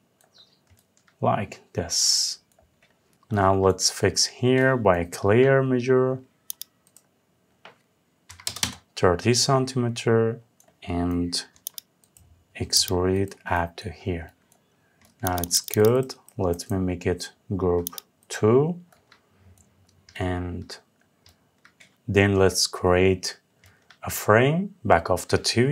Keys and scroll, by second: 8.2 Return.